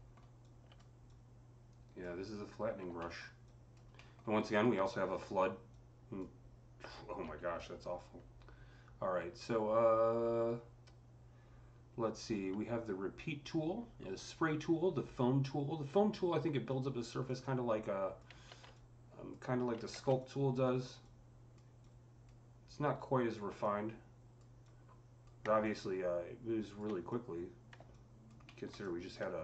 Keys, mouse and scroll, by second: 0.3 alt+click, 0.9-3.3 alt+drag, 0.9 alt+middle click, 2.9 alt+middle click, 3.3 alt+click, 3.8 alt+middle click, 4.3 alt+click, 5.5-9.3 alt+drag, 7.1 z, 16.5 click, 16.5 z, 17.1-28.6 drag, 17.1 z, 18.3 ctrl+z, 19.7 ctrl+z, 28.4 alt+middle click, 28.6 alt+click, 28.7 alt+middle click, 29.3 alt+click.